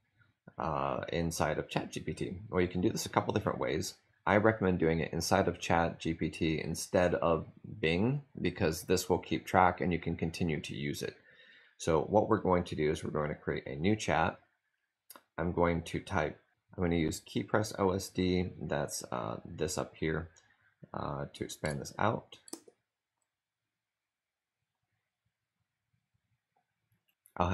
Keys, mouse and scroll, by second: 16.1 click, 20.8-22.3 typing, 25.6-26.4 typing.